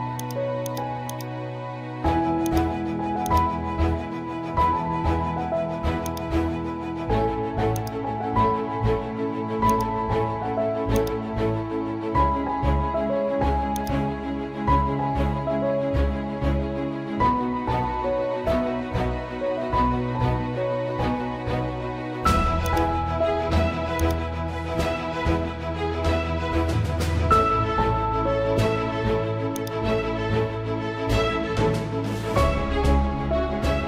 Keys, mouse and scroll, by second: 3.9 ctrl+click, 4.1 ctrl+z, 5.2-5.6 typing, 6.0 click, 7.2 z, 7.7 click, 13.8 click.